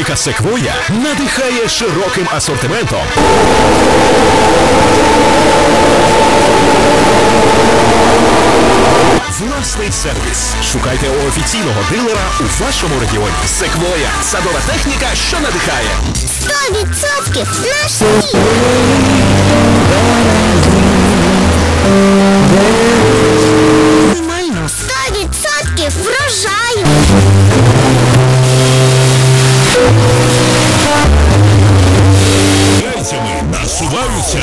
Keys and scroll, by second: 9.6 Page_Down, 24.1 Page_Down, 33.2 Page_Down.